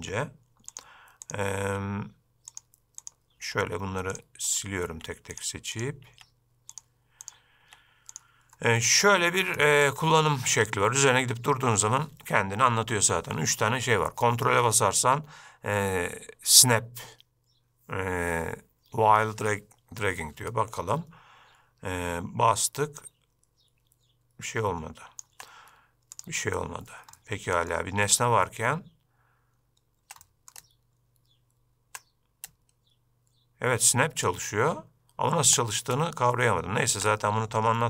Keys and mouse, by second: 0.1 x, 1.7 x, 3.5 x, 4.6 click, 5.0 x, 6.2 x, 7.3 click, 7.7 x, 9.1-9.5 middle drag, 9.7 shift+middle drag, 10.1 shift+middle drag, 23.1-26.3 ctrl+drag, 27.3-27.8 middle drag, 30.4-30.7 middle drag.